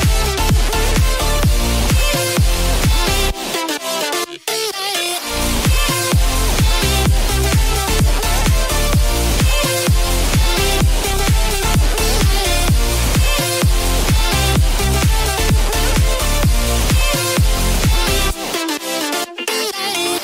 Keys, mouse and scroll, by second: 11.3 click, 11.9-13.2 scroll down 2, 13.6 Tab, 14.1 middle click, 14.7 click, 15.0-15.4 middle drag, 17.4 middle click, 19.0 ctrl+z.